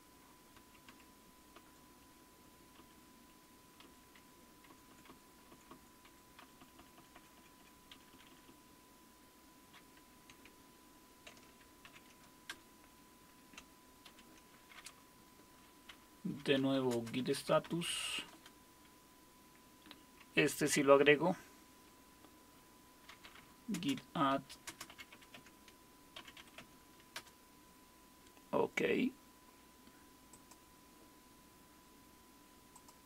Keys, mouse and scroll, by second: 0.6 Left, 0.9 Left, 1.5 Right, 2.0 Delete, 2.8 Down, 3.3 Delete, 3.8 Down, 4.2 Delete, 4.7 Right, 4.9 Right, 5.1 Right, 5.5 Right, 5.7-7.3 Right, 6.1 Delete, 6.4 Up, 7.1 Up, 7.6 Up, 7.9 Down, 8.1-9.6 Down, 11.8 ctrl+o, 12.5 Return, 14.1 ctrl+x, 16.2-18.6 typing, 22.9-26.7 typing, 27.2 Return, 30.3 click, 32.7-33.0 drag.